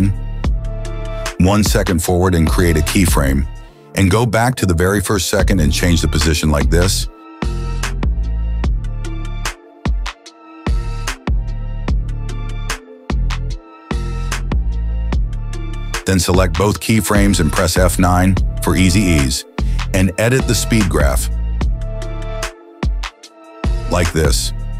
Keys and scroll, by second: 0.7 p, 14.3 space, 15.5 space, 18.4 F9.